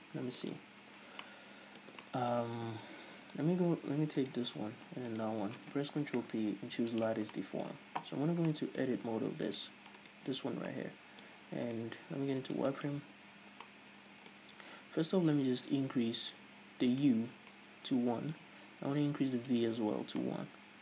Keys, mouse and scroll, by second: 4.6 right click, 5.5 shift+right click, 6.6 ctrl+p, 7.8-9.9 middle drag, 9.9 right click, 10.4 right click, 10.9 Tab, 11.1 middle click, 12.1 right click, 12.4 z, 12.9 click, 13.7 z, 14.0-17.4 middle drag, 15.8 Tab, 17.4 click, 18.0-19.9 middle drag, 19.9 click, 20.6-20.8 middle drag.